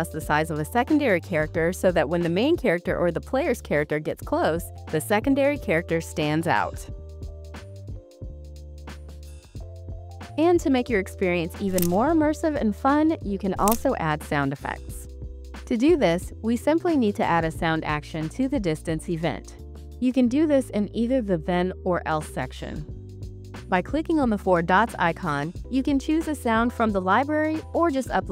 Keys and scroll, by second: 3.6-6.7 typing, 8.2 s, 8.9 w, 10.3-14.1 typing.